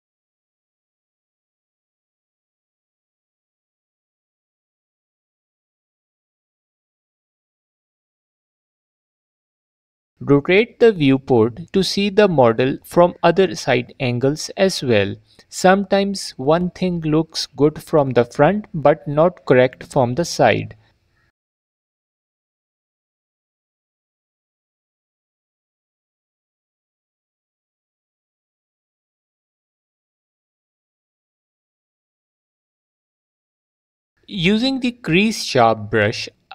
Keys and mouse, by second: 1.7 shift+click, 3.3 middle click, 3.5 f, 3.7-4.7 drag, 6.2 click, 7.1 f, 7.5 f, 8.6 f, 8.7-10.0 drag, 11.3 click, 11.8 f, 12.0-13.0 drag, 16.6 f, 16.8 click, 18.6 alt+click, 19.9 f, 20.1 shift+click, 21.5 middle click, 22.6 middle click, 23.2 shift+middle click, 25.4 shift+click, 27.0 click, 27.3 f, 27.7 click, 28.1 click, 28.6 click, 29.7 shift+click, 31.0 f, 31.1 middle click, 31.2 g, 31.3 f, 31.4 middle click, 31.7 middle click, 33.0 alt+click, 33.2 middle click.